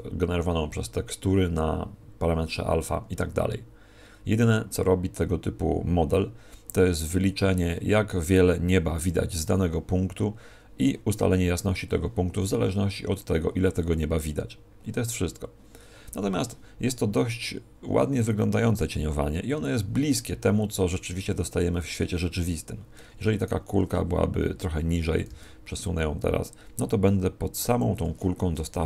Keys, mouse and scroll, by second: 23.0 Escape, 23.4 right click.